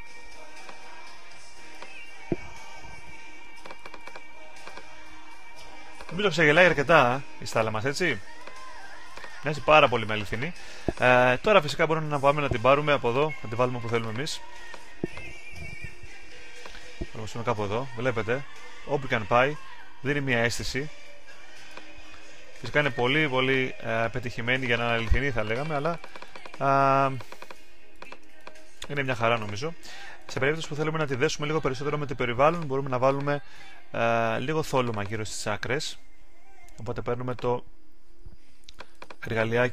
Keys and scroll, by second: 2.9 super+d.